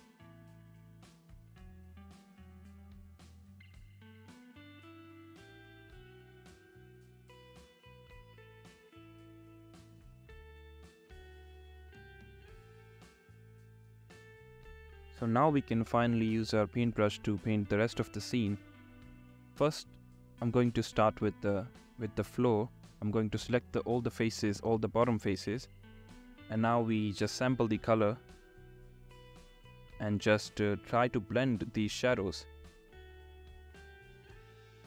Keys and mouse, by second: 5.5 click, 6.1 shift+click, 11.8 alt+q, 13.2 click, 25.4 shift+middle click, 26.4-26.9 drag, 27.3 shift+middle click, 34.8 ctrl+z.